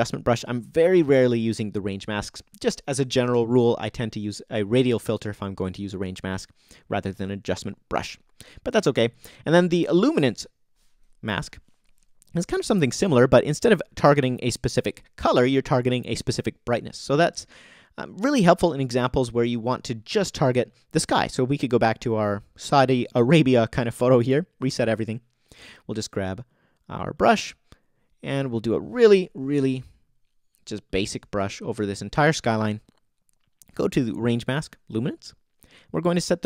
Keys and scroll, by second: 13.1 BackSpace, 29.1 o.